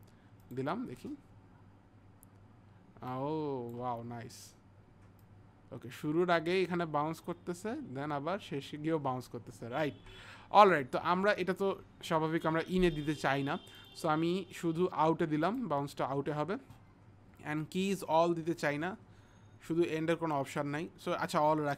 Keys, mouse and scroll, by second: 0.4 click, 3.2 click, 5.2 click, 9.9 ctrl+z, 14.1 ctrl+z, 14.1 click, 18.0 click.